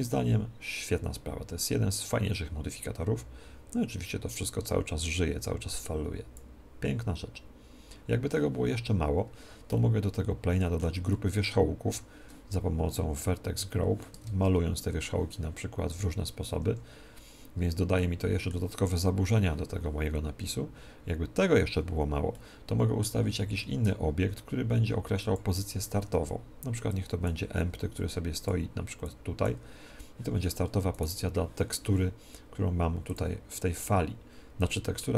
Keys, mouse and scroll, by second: 9.0-13.1 middle drag, 14.6 ctrl+Tab, 16.8 ctrl+Tab, 18.0-19.8 middle drag, 22.5-24.3 middle drag, 23.8 shift+a, 25.2 shift+a, 26.9-31.2 drag, 31.2-32.8 right drag, 33.1-35.0 drag.